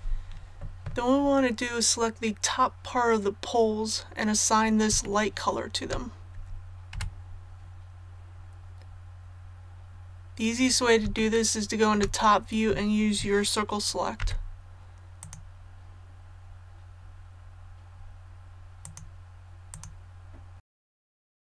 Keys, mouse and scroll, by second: 5.0 shift+middle click, 6.9 KP_7, 8.2 scroll up 1, 11.1 shift+middle click, 14.1 c, 15.1 click, 16.8-17.7 scroll down 1, 17.7-18.8 scroll up 1, 18.8 click, 21.1 right click, 21.2 shift+middle click, 21.3 shift+c, 21.3 click.